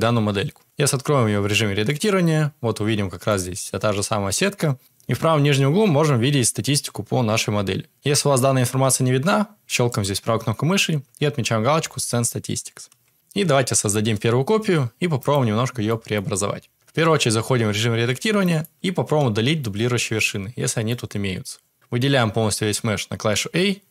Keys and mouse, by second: 1.2 Tab, 3.2-4.3 middle drag, 13.1 Tab, 13.7 shift+d, 15.8 shift+drag, 17.7 shift+Tab, 18.4 shift+click, 19.1 a, 19.5-20.8 middle drag.